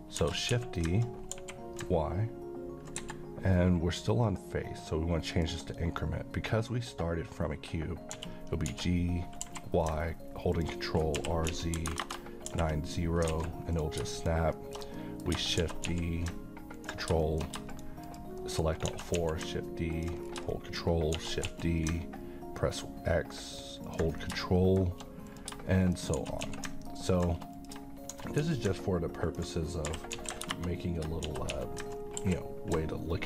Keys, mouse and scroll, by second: 0.2-1.3 typing, 3.0 Escape, 4.2 click, 8.1-9.4 typing, 10.5 ctrl+click, 11.1 r, 11.5 z, 12.5 r, 13.3 alt+a, 13.7 click, 14.2 shift+click, 14.6 shift+scroll down 1, 14.8 shift+scroll up 1, 14.9 middle click, 15.6 typing, 16.8 click, 17.1 shift+scroll down 1, 17.2 shift+scroll up 1, 17.2 shift+middle click, 17.7 click, 18.4 shift+middle click, 18.9 shift+d, 19.2 x, 19.9 ctrl+click, 20.3 scroll down 1, 20.5 middle click, 21.1 d, 21.4 x, 23.9 ctrl+click, 24.2 scroll down 1, 24.5-25.1 middle click, 25.3 click, 26.2 shift+d, 26.4 x, 27.2 click, 28.2-30.1 typing, 29.3 ctrl+click, 31.2-32.2 typing.